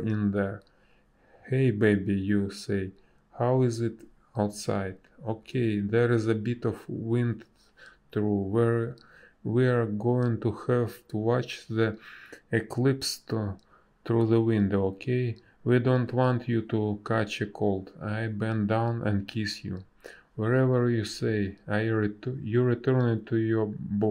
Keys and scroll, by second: 0.4 ctrl+z, 0.5 space, 1.3 space, 3.6 space, 5.8 space, 9.7 a, 12.6 space, 16.1 b, 18.2 space, 22.7 space.